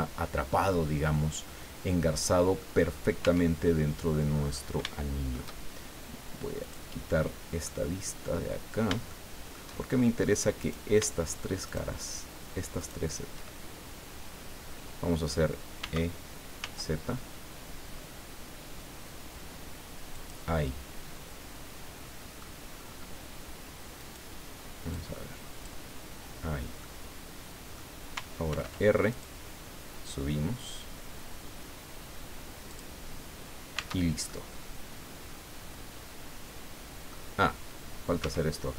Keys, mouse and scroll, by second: 0.7 scroll down 2, 1.1-2.8 drag, 3.2 Tab, 3.6 click, 5.0 shift+click, 6.6 click, 7.6-9.8 drag, 10.6 right click, 11.7 shift+right click, 12.8 shift+right click, 14.1 scroll down 2, 15.8 e, 16.6 z, 20.1 click, 20.6-22.5 middle drag, 22.7-23.2 scroll up 2, 24.0 right click, 24.9-25.9 drag, 26.2 scroll down 2, 26.8-27.9 drag, 28.5 ctrl+r, 29.2 click, 32.7 click, 33.2-33.7 scroll down 2, 33.7 Tab, 34.3-37.3 drag, 37.3-37.7 scroll up 2, 38.2 Tab.